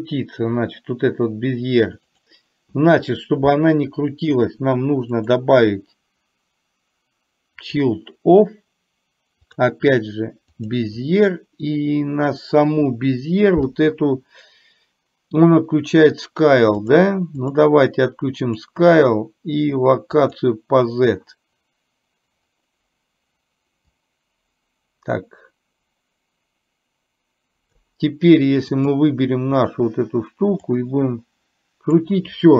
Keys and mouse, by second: 2.0 click, 5.3-7.9 drag, 9.5-10.8 drag, 17.5 click, 18.5 click, 20.3 click, 24.0-27.9 drag, 28.9 click, 30.8-32.2 drag.